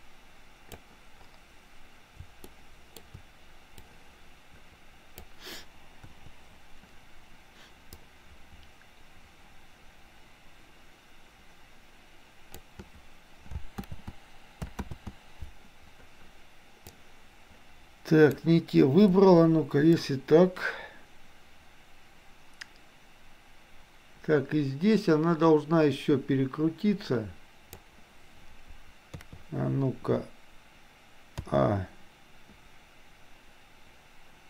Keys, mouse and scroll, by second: 2.6 shift+middle click, 3.8-5.3 drag, 6.1 Delete, 8.1-12.8 drag, 13.9 ctrl+z, 16.9-18.4 drag, 19.1 Delete, 20.0-27.9 drag, 29.3 KP_3, 31.4 a.